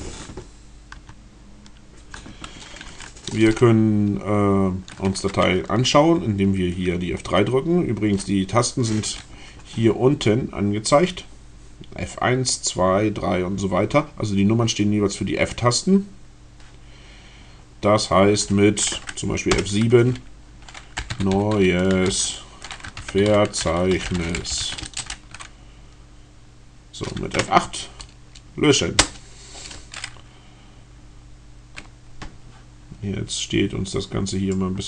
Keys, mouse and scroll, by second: 0.0 Tab, 0.7 Tab, 2.9 Down, 19.3 F7, 20.5-25.2 typing, 27.3 F8, 28.8 Return, 34.6 click.